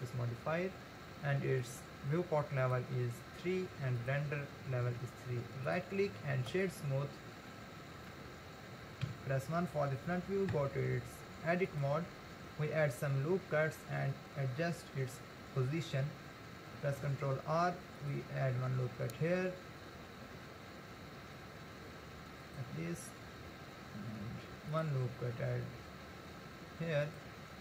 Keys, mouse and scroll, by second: 1.6-5.7 drag, 5.7-7.5 right drag, 7.5-9.1 middle drag, 9.1 KP_1, 10.5 Tab, 12.4-15.5 scroll up 1, 17.0 ctrl+r, 24.2 ctrl+r.